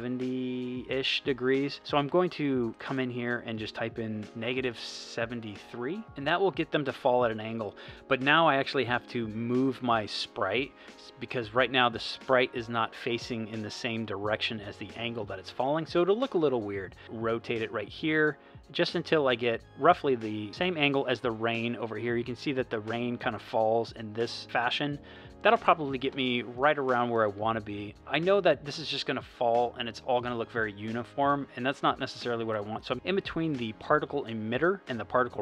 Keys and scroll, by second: 4.2 -, 4.6 7, 5.7 3.